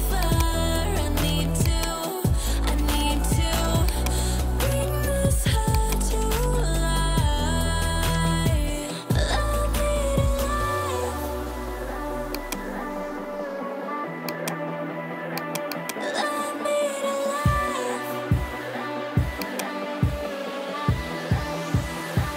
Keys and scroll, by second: 17.5 ].